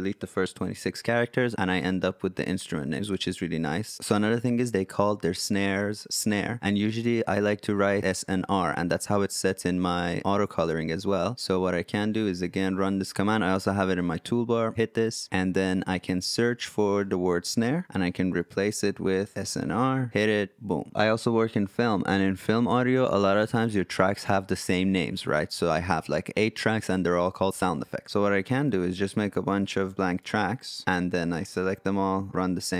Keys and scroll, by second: 17.8 typing, 19.1 typing, 28.1 BackSpace.